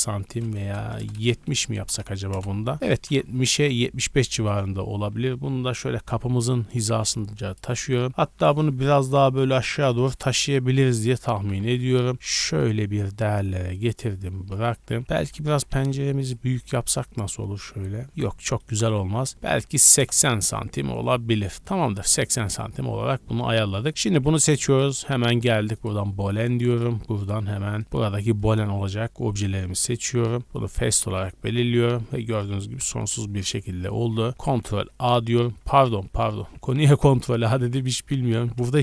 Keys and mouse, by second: 3.0 ctrl+l, 3.0 ctrl+click, 5.1 g, 11.3 g, 14.6 z, 15.0 3, 15.1 z, 15.5 g, 18.1 ctrl+z, 18.4-22.0 middle drag, 18.7 g, 20.7 Tab, 22.0 click, 22.1-24.6 middle drag, 23.7 drag, 24.6-26.8 drag, 26.8-30.5 middle drag, 27.9 z, 30.5 click, 30.7-36.9 middle drag, 34.3 ctrl+a, 34.8 z, 35.7 ctrl+z, 36.1 ctrl+z, 37.0 Tab, 37.0 middle click, 37.5 3, 38.3-38.8 middle drag, 38.3 z.